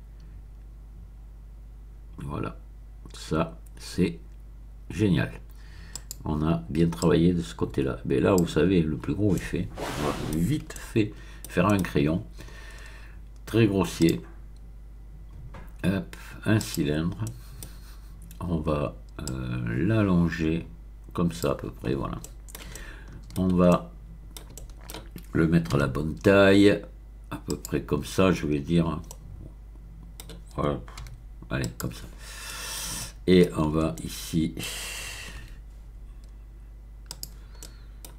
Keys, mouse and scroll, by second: 5.9 click, 7.0-8.8 drag, 8.9-9.3 scroll down 1, 9.3-10.5 middle drag, 10.7 shift+middle click, 11.6 shift+middle click, 14.0 click, 16.6 click, 17.2 middle click, 17.7-19.0 scroll down 1, 19.2-21.7 drag, 22.2 middle click, 24.7 shift+middle click, 25.7 s, 27.5 click, 28.2-29.1 scroll up 2, 29.1-30.4 middle drag, 31.0 s, 31.6 click, 32.1-32.8 scroll up 2, 32.9 Delete, 33.0 middle click, 33.3 Delete, 33.5 middle click, 33.8 `, 33.9-35.1 middle drag, 35.4 Tab, 37.1 click, 37.6 middle click.